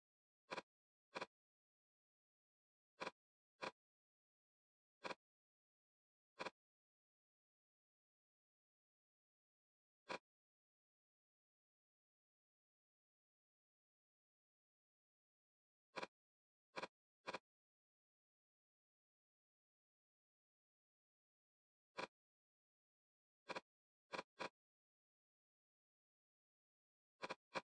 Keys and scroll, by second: 0.0 l, 13.8 Escape, 22.9 d, 24.7 l, 24.9 Return.